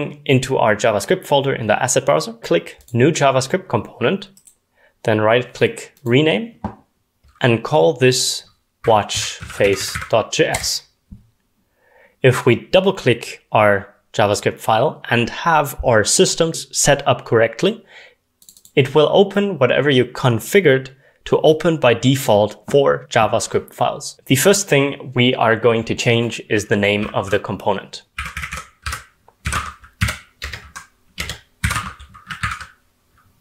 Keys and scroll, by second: 8.8-10.6 typing, 12.5-14.7 typing, 23.9-24.6 typing, 28.2-30.5 typing, 31.2 Escape, 32.2-33.4 typing.